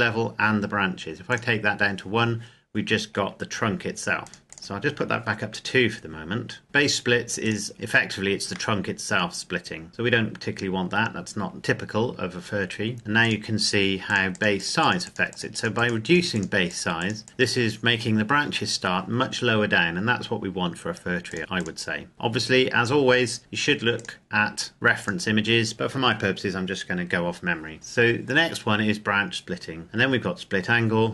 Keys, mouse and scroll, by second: 1.3 click, 4.2 click, 7.4 click, 8.7 middle click, 11.5 click, 21.3 click, 24.0 click.